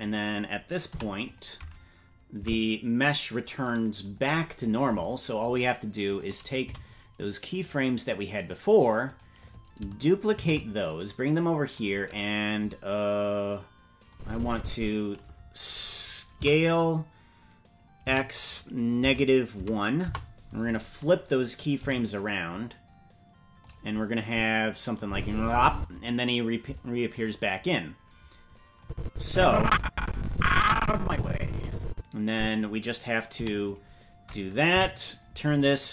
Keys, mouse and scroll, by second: 0.8 i, 2.4 Right, 4.3-5.0 scroll up 10, 6.0 right click, 6.6 c, 10.3 shift+d, 14.1 click, 16.3 s, 21.7 g, 24.2 click, 25.0 space, 25.7 space, 27.2-28.8 right drag, 28.8-32.5 drag, 33.3 i, 34.7 Right.